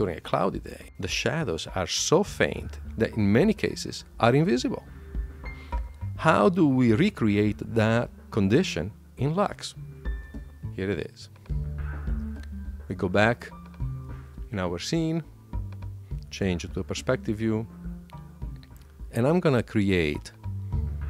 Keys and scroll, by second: 12.0 super+q, 13.9 Escape.